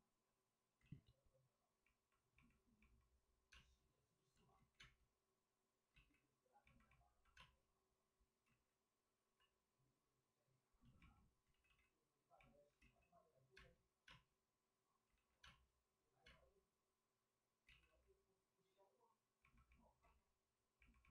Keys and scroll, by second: 0.7 ctrl+z, 3.5 space, 4.5 ctrl+z, 4.8 space, 5.9 ctrl+z, 7.3 space, 8.4 ctrl+z, 9.1 c, 11.4 ctrl+z, 13.5 space, 15.0 space, 15.1 ctrl+z, 15.4 space, 17.6 ctrl+z.